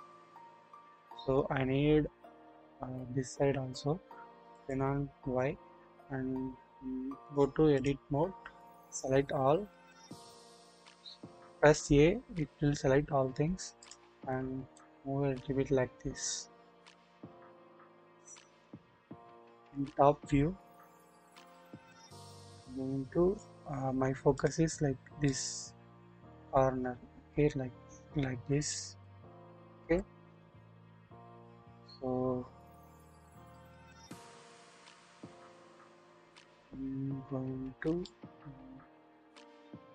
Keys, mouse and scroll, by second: 0.4-1.8 scroll down 1, 4.5 click, 7.3-7.8 drag, 8.9 a, 11.7 scroll down 1, 13.7 click, 14.8-18.6 drag, 19.5 KP_7, 20.2-21.0 scroll up 1, 22.5 click, 24.4 click, 25.2-28.7 drag, 30.4 ctrl+7, 30.4 ctrl+z, 31.5-33.0 drag, 34.4 KP_7, 35.5 shift+middle click, 36.2 shift+scroll up 2, 38.0-39.7 drag, 39.7 middle click, 39.7 scroll up 1.